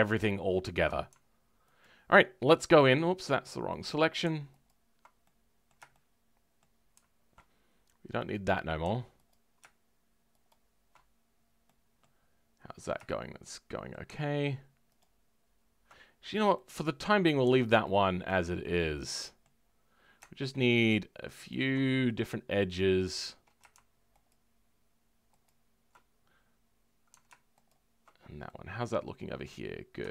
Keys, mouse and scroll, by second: 0.3-1.8 shift+middle drag, 1.8 alt+click, 3.8 click, 5.2-9.2 middle drag, 9.2 click, 11.1-11.6 scroll down 3, 11.6 middle click, 12.2-13.0 scroll up 3, 13.0-14.9 shift+middle drag, 14.9 alt+shift+click, 16.5-17.8 middle drag, 17.8 alt+click, 18.2-18.6 scroll down 2, 18.6 middle click, 19.5-20.4 scroll up 3, 20.6 alt+shift+click, 21.4 alt+shift+click, 21.8-24.2 shift+middle drag, 24.2 alt+shift+click, 25.4 alt+shift+click, 28.1 scroll down 2, 28.4-29.6 middle drag, 29.6-30.1 scroll up 2.